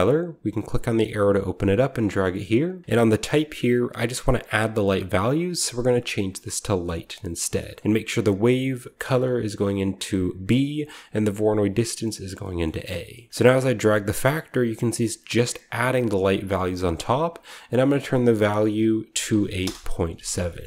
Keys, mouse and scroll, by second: 0.4 click, 0.6-0.9 drag, 1.9-2.9 drag, 2.3-4.1 scroll up 1, 2.9 middle click, 3.0 click, 6.7 click, 7.7 middle click, 7.8-9.5 scroll down 2, 8.3 click, 12.6 middle click, 13.2-14.6 middle drag, 13.2-14.2 scroll up 1, 13.4-17.0 drag, 14.2-14.6 scroll up 1, 16.8 right click, 17.7-19.2 drag, 19.2 typing, 19.5 Return, 20.3-20.6 scroll down 1, 20.5-20.6 middle drag.